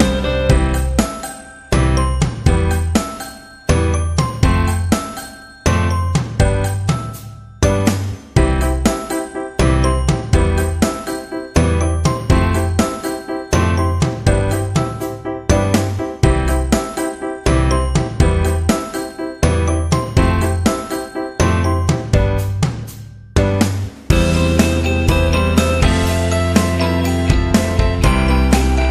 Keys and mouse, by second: 0.4 g, 2.5 g, 3.1 KP_1, 4.1 Tab, 4.6-5.7 middle drag, 5.9 Tab, 6.0 middle click, 8.7 Tab, 8.7-9.3 middle drag, 9.4 KP_3, 10.7 Tab, 11.2 g, 14.3 Tab, 14.3-15.0 middle drag, 15.3 w, 16.4-16.9 middle drag, 17.5 middle drag, 18.1 KP_3, 18.6 alt+z, 19.1-19.4 shift+middle drag, 19.8 Tab, 20.4 middle click, 21.7 middle click, 22.8-23.3 alt+middle drag, 23.2 alt+z, 23.5 shift+middle drag, 23.9-24.9 middle drag, 26.3 g.